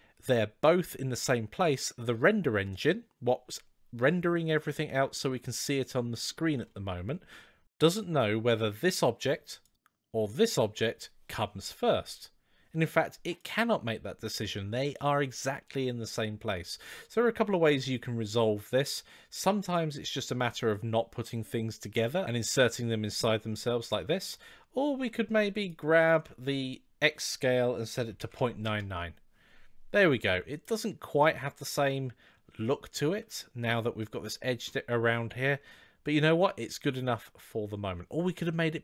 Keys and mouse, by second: 3.3-5.0 middle drag, 5.7-6.1 middle drag, 9.4 click, 25.4-29.5 shift+drag, 28.2 KP_9, 30.4 click, 34.7-36.0 middle drag.